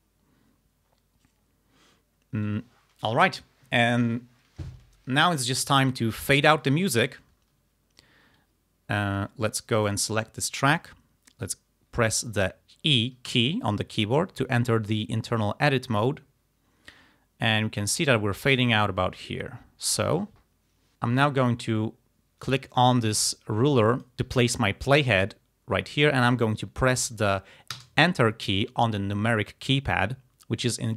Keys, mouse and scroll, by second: 5.1 ctrl+scroll down 2, 7.3 ctrl+scroll up 2, 8.1 ctrl+scroll down 2, 9.9 click, 13.3 e, 20.9 click, 21.3-22.7 drag, 22.8-24.2 drag, 27.8 KP_Enter.